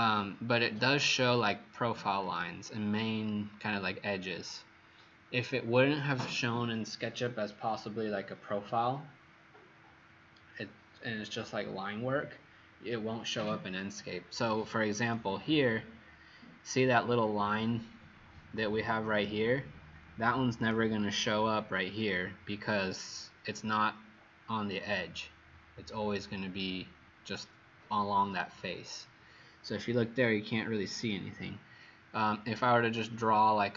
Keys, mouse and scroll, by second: 17.8-19.1 scroll up 12, 20.6 click.